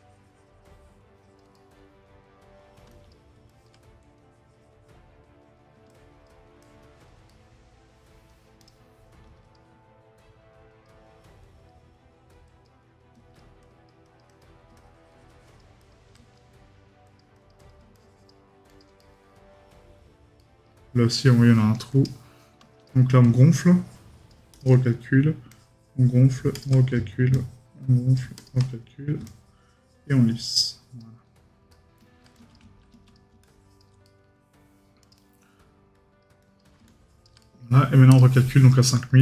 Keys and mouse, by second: 1.5 right click, 7.3 right click, 19.0 right click, 20.4 right click, 31.7 right click, 34.0 right click, 37.4 right click.